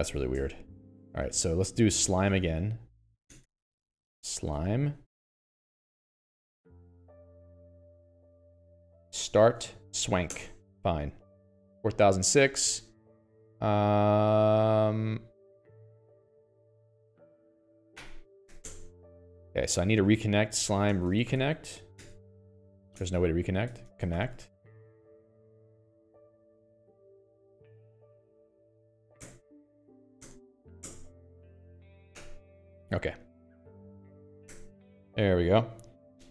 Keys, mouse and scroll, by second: 11.9 j, 12.7 alt+x, 13.5 Escape, 14.3 click, 16.2 a, 17.0 i, 17.9 Escape, 18.3 i, 18.9 t, 19.0 Return, 19.6 Return, 20.3 alt+x, 20.8-24.9 typing, 29.6 Return, 30.6 Return, 34.7 y, 34.9 Return.